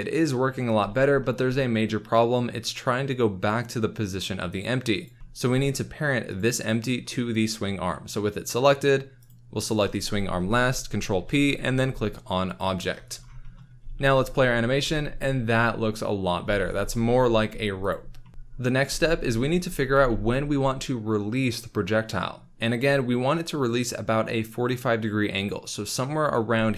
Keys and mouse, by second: 0.7 space, 5.0 click, 5.2 shift+KP_1, 6.3 click, 11.1 ctrl+p, 13.4 shift+drag, 13.8 space, 14.7 z, 16.4 space, 17.9 click, 18.8 space, 19.9 space, 23.3 click.